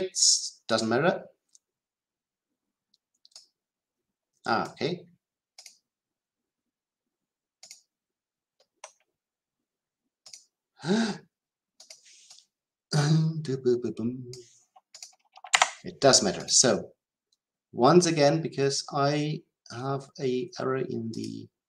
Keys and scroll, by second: 15.5 Delete.